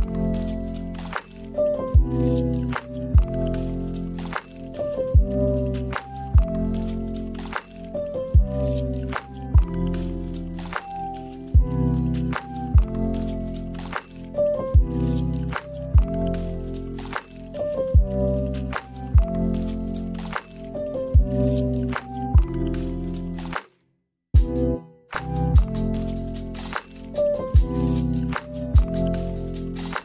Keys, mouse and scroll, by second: 3.5 scroll down 1, 3.6 middle click, 4.5 click, 5.8 click, 7.4 click, 12.3 click, 14.6 click, 16.4 middle click, 17.3 middle click, 19.2 click, 20.9 click, 27.2 click.